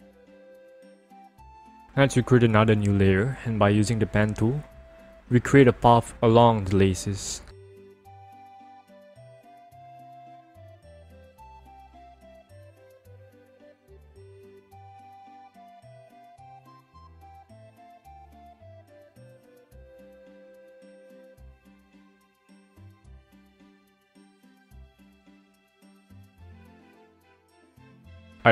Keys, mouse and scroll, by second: 0.7 click, 3.8 click, 4.3-6.7 scroll down 1, 9.4-11.7 scroll up 1, 11.7 click, 15.5 click, 17.7 ctrl+click, 20.0 ctrl+click, 22.8 click, 24.0 click, 26.6 click, 28.4 ctrl+click.